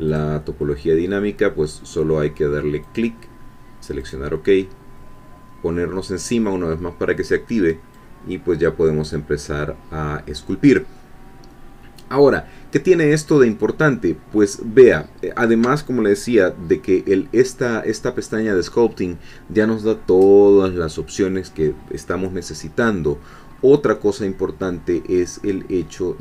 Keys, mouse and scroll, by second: 0.1 click, 2.8 click, 4.0 click, 7.9-10.9 drag, 12.3-12.7 scroll down 1, 12.9-13.9 scroll up 1, 13.9 scroll down 1, 23.5-23.9 scroll up 1, 23.9 scroll down 1, 24.2-25.5 middle drag, 25.9 scroll up 1.